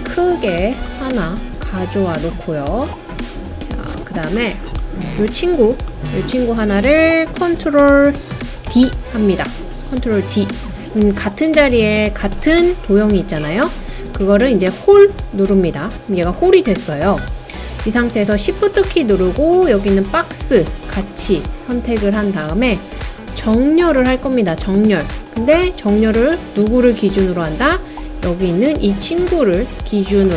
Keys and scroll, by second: 8.7 super+d.